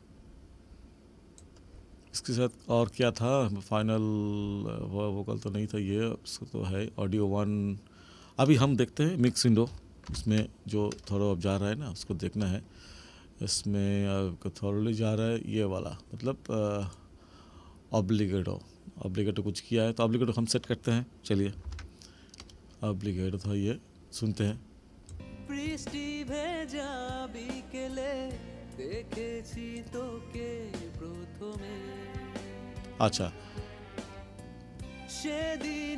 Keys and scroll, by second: 10.0 ctrl+=, 21.6 ctrl+=, 25.1 space.